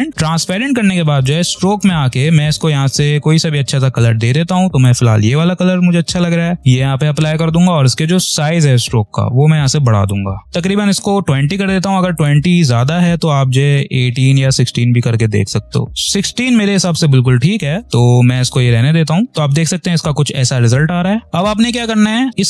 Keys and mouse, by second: 4.7 click, 4.7 typing, 10.0 click, 14.3 click, 19.3 click, 22.3-22.4 drag.